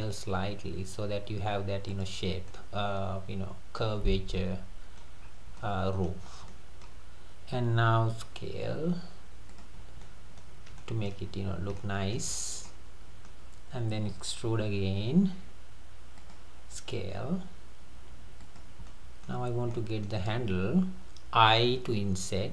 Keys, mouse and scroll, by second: 2.2-2.5 scroll down 2, 2.5-5.2 middle drag, 5.2-5.6 scroll up 3, 5.6-6.2 middle drag, 6.2 scroll down 2, 6.5-8.2 middle drag, 8.2 s, 9.8 scroll down 2, 10.0-10.8 middle drag, 10.8-11.8 scroll up 6, 10.9 shift+middle click, 11.8-12.3 shift+middle drag, 12.3-12.6 scroll up 2, 12.6-13.5 middle drag, 13.5 scroll down 1, 14.2-14.6 scroll down 1, 14.6 e, 16.8 s, 18.9-19.5 middle drag, 19.5 scroll up 1, 19.7-21.6 middle drag.